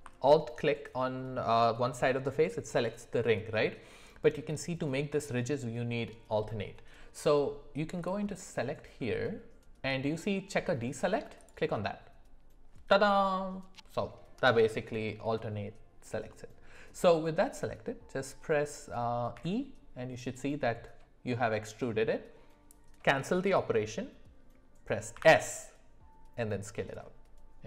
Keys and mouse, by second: 8.4-11.5 drag, 16.3 middle click, 19.4 e, 25.1 s.